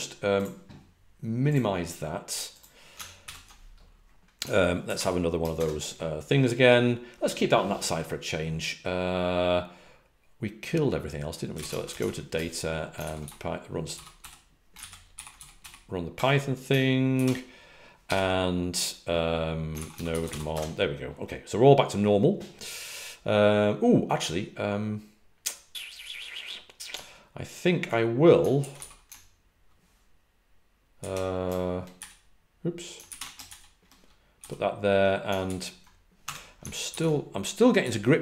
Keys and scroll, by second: 3.2 alt+super+f, 11.2-12.3 typing, 13.9-14.6 typing, 15.1 ctrl+r, 15.8-16.5 typing, 19.9-20.7 typing.